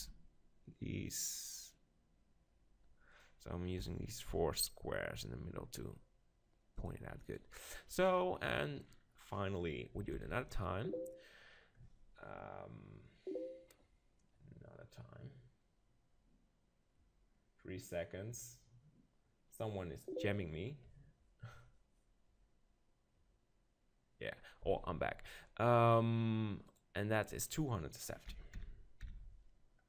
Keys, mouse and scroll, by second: 3.2-5.0 drag, 3.8 g, 6.8-8.6 drag, 7.3-9.1 right drag, 8.0-10.3 middle drag, 10.1 shift+d, 10.3-12.2 right drag, 25.1-26.7 middle drag, 26.7-28.6 drag.